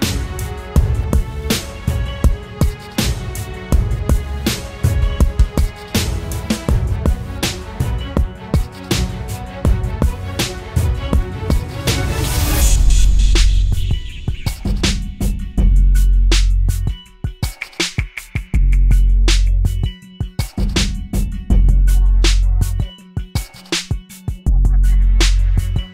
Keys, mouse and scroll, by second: 16.7 alt+shift+click, 20.3 alt+shift+click, 21.9 ctrl+click.